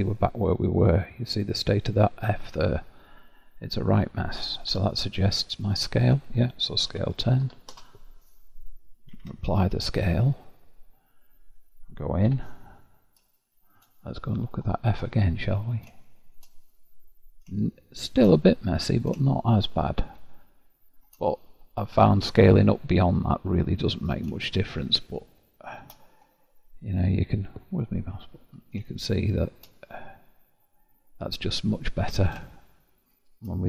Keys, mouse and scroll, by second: 0.8-2.1 scroll up 2, 2.1-3.3 scroll up 6, 3.3-4.2 scroll down 17, 4.7 Tab, 6.9 s, 9.1 ctrl+a, 10.4-10.9 scroll down 10, 12.3 Tab, 13.3 shift+middle click, 14.1-14.7 scroll up 1, 14.7-15.3 scroll up 13, 15.3-15.9 scroll down 1, 15.9 shift+middle click, 16.6-17.5 scroll up 1, 17.5-21.4 shift+middle drag, 21.4-22.9 scroll down 6, 22.9 scroll up 1, 23.1-24.4 scroll down 7, 24.4-26.2 shift+middle drag, 26.2-28.0 scroll up 6, 28.0 middle click, 28.1-28.8 scroll up 7, 28.9 shift+middle click, 29.9-30.5 scroll up 2, 30.5-31.1 scroll down 1, 31.1-31.7 scroll down 12, 31.7-33.6 middle drag.